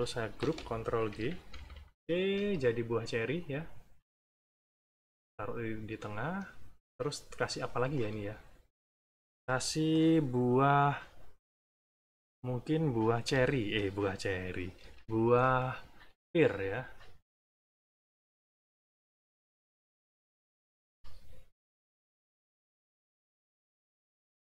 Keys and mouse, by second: 0.3 ctrl+g, 1.1 -, 2.2 =, 3.1-5.1 drag, 5.6 click, 6.5 middle click, 7.6 middle click, 8.6 click, 9.3 middle click, 11.1 middle click, 13.2 b, 14.2 middle click, 14.8 =, 15.5 middle click, 16.5 click, 17.1 click, 18.6 click, 19.6 click, 20.6 click, 21.3 click, 22.1 click, 22.9 click, 24.0 click.